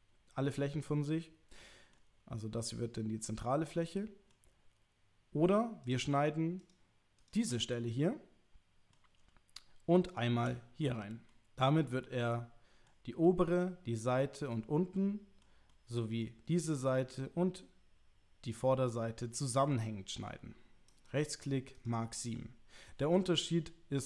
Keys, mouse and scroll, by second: 3.6 middle click, 5.9 click, 7.7-8.9 middle drag, 11.3 middle click, 12.2 middle click, 13.2 middle click, 14.1 middle click, 15.0 middle click, 15.8 middle click, 16.8 middle click, 19.0-20.3 middle drag, 21.0 right click, 22.4 l, 23.0 u.